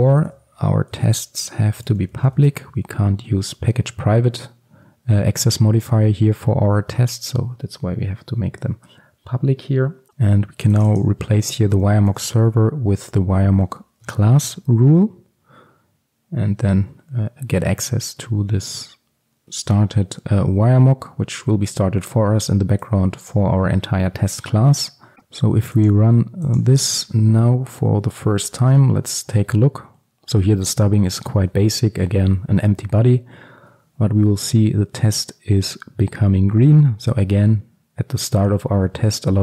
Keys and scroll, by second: 3.0 alt+1, 14.1 Return.